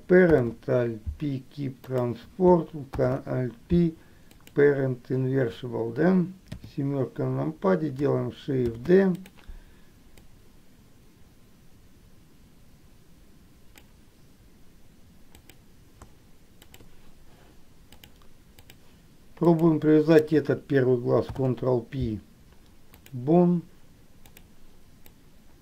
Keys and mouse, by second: 6.6 KP_7, 8.8 shift+d, 10.5-14.0 drag, 15.4 click, 16.9 shift+click, 18.2 click, 19.5 click, 21.4 ctrl+p, 25.3-25.6 drag.